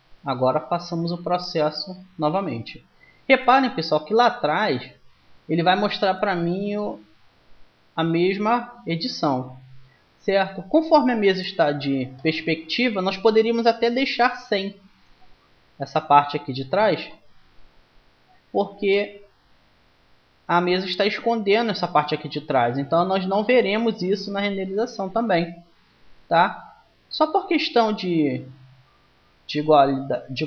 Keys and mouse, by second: 6.3-8.1 middle drag, 11.0 KP_1, 15.6-20.1 drag, 24.7-26.5 middle drag.